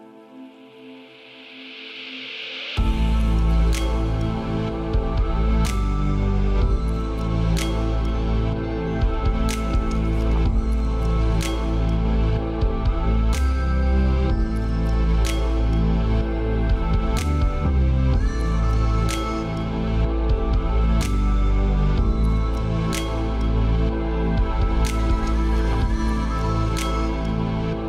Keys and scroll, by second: 18.2 ctrl+a, 23.8 ctrl+d, 25.1 ctrl+space.